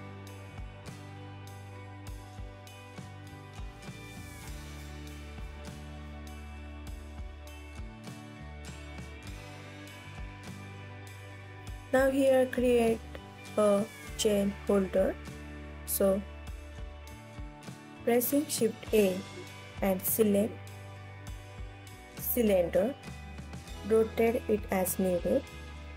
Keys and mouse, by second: 1.0 click, 1.2 g, 1.8 click, 2.0 r, 2.5 click, 2.7 g, 3.1 drag, 4.9 KP_1, 5.5 click, 5.8 ctrl+s, 6.1 click, 6.3 shift+d, 7.1-8.2 alt+drag, 8.4 g, 8.9 KP_1, 9.3 ctrl+s, 9.9 ctrl+s, 10.1 alt+middle drag, 10.8 click, 11.4 KP_7, 13.0 shift+click, 13.7 KP_3, 15.2 shift+click, 16.0 KP_1, 17.6 drag, 18.5 middle click, 20.0 click, 20.5 click, 21.2 shift+a, 23.4 r, 24.1 y, 24.4 KP_9, 24.5 KP_0, 25.0 click, 25.8 s.